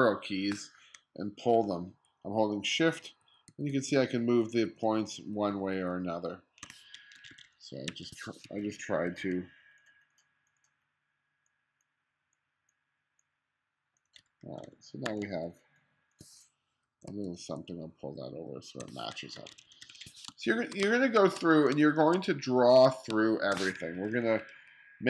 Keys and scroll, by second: 2.0 shift+Left, 2.8 shift+Left, 4.7 shift+Right, 7.2 1, 8.5 2, 14.3 1, 15.1 2, 16.9 Left, 18.4 shift+Right, 19.4 1, 20.3 space, 20.9 space, 21.7 space, 23.1 space, 24.0 2.